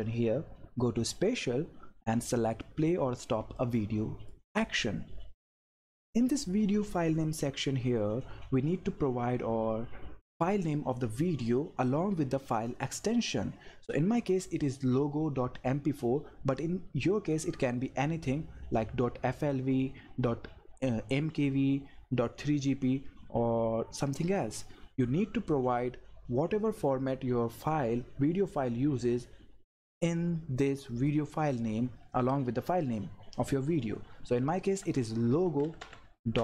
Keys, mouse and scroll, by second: 3.5 click, 3.7-6.0 drag, 34.8-36.4 typing.